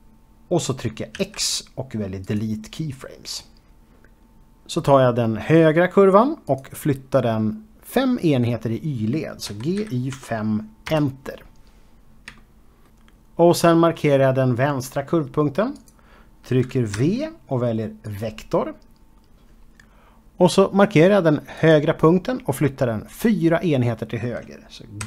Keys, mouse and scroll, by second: 1.1 x, 2.1 click, 6.5 click, 9.5-10.2 typing, 10.9 Return, 11.6-12.3 scroll down 2, 12.4 shift+middle click, 16.0 click, 17.2 v, 18.3 click, 21.4 click, 24.8 g.